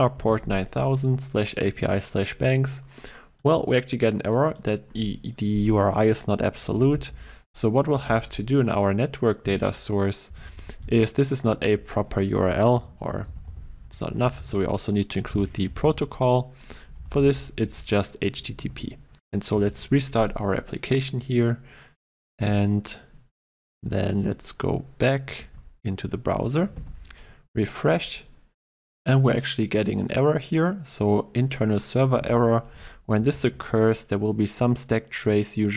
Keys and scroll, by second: 8.1 ctrl+e, 17.0 ctrl+shift+Left, 18.5 ctrl+shift+Left, 18.6 ctrl+s, 19.5 shift+F10.